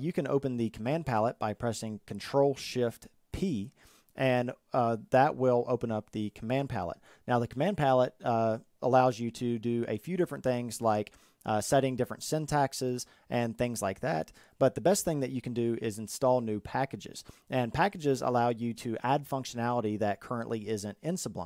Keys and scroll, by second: 1.9 ctrl+shift+p.